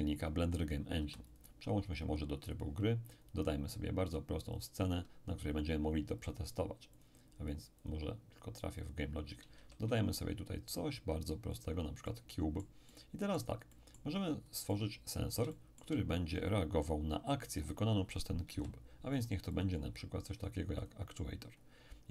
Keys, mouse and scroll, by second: 1.0 x, 1.3-4.2 drag, 4.5 click, 6.2-9.8 drag, 9.5 shift+a, 11.5-14.1 drag, 12.0-14.1 middle drag, 14.1-14.7 scroll up 1, 14.7-16.8 middle drag, 17.2-18.3 scroll up 2, 18.5 n, 19.5 click, 20.8 click, 21.5-22.1 scroll up 2.